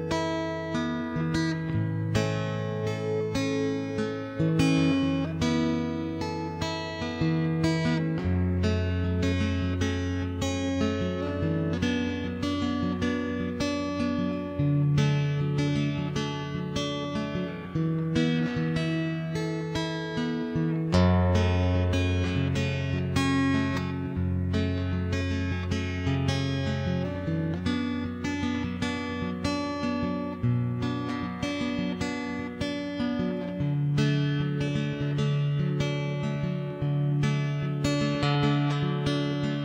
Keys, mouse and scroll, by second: 0.4 middle click, 0.6 click, 0.6 right click, 0.8 middle click, 1.1 ctrl+KP_1, 1.1 middle click, 2.2 click, 3.2-4.5 middle drag, 4.5 ., 4.7 click, 5.3-6.6 middle drag, 6.6 click, 6.9 middle click, 7.5 middle click, 8.1-9.4 right drag, 8.6 middle click, 9.0 click, 9.0 middle click, 10.4 middle click, 10.7 ctrl+KP_1, 10.9 middle click, 11.4 e, 12.2 click, 13.2 middle click, 14.0 right click, 14.6 middle click, 15.1 right click, 15.7 middle click, 16.2 ctrl+KP_1, 16.5 e, 16.8 click, 17.7 middle click, 17.9 Tab, 18.1 shift+space, 18.3 click, 18.9 middle click, 19.3 click, 19.3 middle click, 20.1 middle click, 20.7 ctrl+s, 22.0 shift+space, 22.9 shift+d, 23.3 m, 23.6 right click, 23.8 middle click, 25.1-27.7 typing, 25.7 click, 26.3 middle click, 27.1 right click, 27.3 Tab, 27.3 click, 27.3 middle click, 28.2 ctrl+l, 28.5-30.2 middle drag, 28.6 click, 30.2 a, 30.5 c, 32.2 v, 32.7 middle click, 32.9 right click, 33.1 middle click, 34.4 Tab, 34.6-37.2 typing, 35.2 middle click, 35.2 right click, 36.7 alt+h, 36.9 Tab, 37.1 Tab, 37.8 click, 38.2 Tab, 39.1 click, 39.1 shift+h, 39.3 Escape, 39.3 right click.